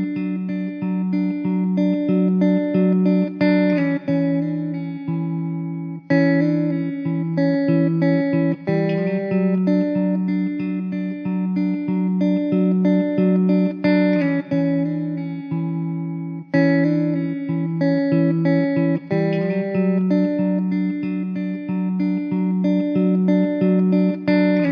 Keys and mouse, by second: 0.4 alt+w, 1.3 middle click, 11.8 alt+w, 12.8 alt+middle click, 13.7 ctrl+z, 16.1 middle click, 18.5 alt+w, 23.7 middle click.